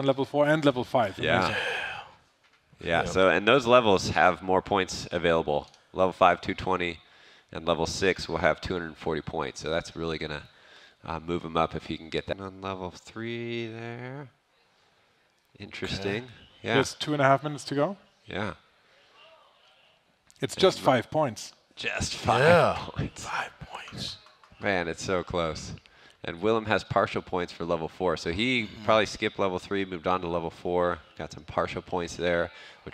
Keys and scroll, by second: 0.0-0.6 typing, 0.6 Return, 2.6-4.0 typing, 5.2 ctrl+shift+Left, 5.3 ctrl+shift+Left, 5.6 Delete, 5.8 ctrl+Right, 6.2 Delete, 6.3 ctrl+Right, 6.9 ctrl+shift+Right, 7.1 Delete, 7.5 Delete, 7.6 ctrl+Right, 8.4 Delete, 8.6 Delete, 9.1 Right, 9.2 Right, 9.5 Delete, 11.0-12.2 typing, 12.1 ctrl+Down.